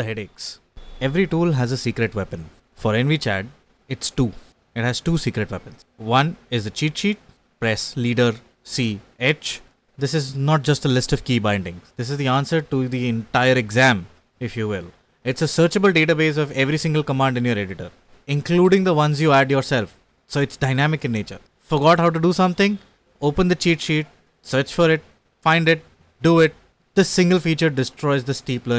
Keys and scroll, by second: 0.2-2.2 typing, 2.7 ctrl+d, 3.1 ctrl+d, 3.5 ctrl+u, 3.6 ctrl+u, 3.7 ctrl+u, 3.8 ctrl+u, 9.3 ctrl+d, 9.5 ctrl+d, 9.7 ctrl+u, 9.7 ctrl+u, 9.8 ctrl+u, 22.7 ctrl+d, 23.5 ctrl+u, 23.7 ctrl+d, 24.1 ctrl+d, 24.4 ctrl+d, 24.9 ctrl+b, 25.0 ctrl+f, 25.1 ctrl+f, 25.2 ctrl+b, 25.2 ctrl+b, 25.2 ctrl+b.